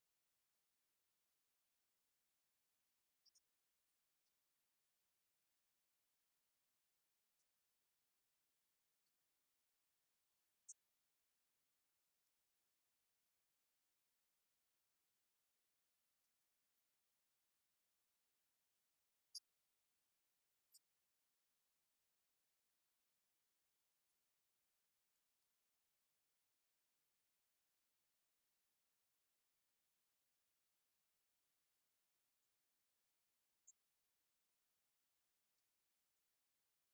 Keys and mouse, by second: 2.1-3.9 drag, 6.7 click, 7.3-9.7 drag, 11.2-12.8 drag, 13.3-16.7 drag, 20.2 click, 20.8 click, 21.2 click, 21.6 click, 22.0 click, 22.5 click, 23.0 click, 23.4 click, 25.8 click, 26.8 click, 27.7 click, 32.6-34.2 drag, 34.8-36.9 drag.